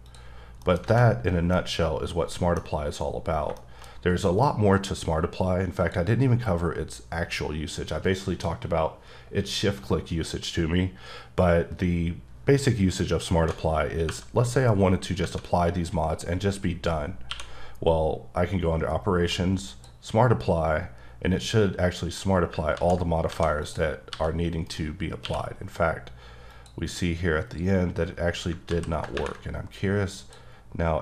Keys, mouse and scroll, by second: 0.4 scroll down 3, 0.6 middle click, 0.9 alt+a, 1.2-1.8 scroll down 2, 1.5 middle click, 3.5 shift+scroll down 1, 3.6 shift+middle click, 5.8 click, 15.2 Tab, 17.3 q, 22.1 click, 22.5 click, 22.7 ctrl+z, 23.4 alt+a, 23.6 click, 24.1 g, 24.7 right click, 25.2 q, 26.5 click, 27.4-28.4 scroll up 1, 28.7 ctrl+z, 30.2 click.